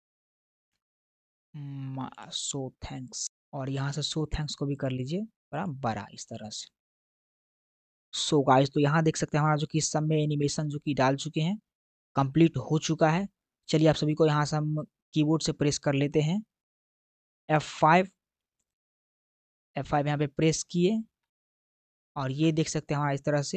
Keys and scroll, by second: 21.0 F5.